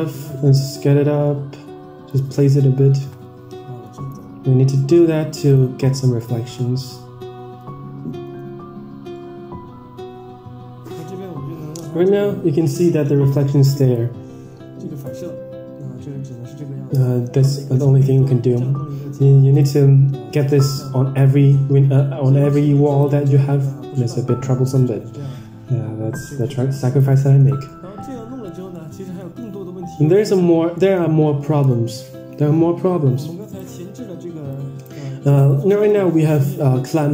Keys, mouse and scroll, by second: 0.6-1.0 scroll down 6, 0.6 s, 2.7 KP_0, 6.2 click, 13.8 click, 15.0 drag, 19.5 click, 22.9 click, 26.3-26.9 drag, 27.4 middle click, 27.6-28.3 scroll down 21, 28.3 middle click, 29.1 middle click, 29.8 `, 30.6 middle drag, 31.7 click, 32.2-32.8 scroll up 3, 32.6 middle click, 33.4 click, 33.6 Tab, 34.4 click, 35.3 click, 35.7 Tab.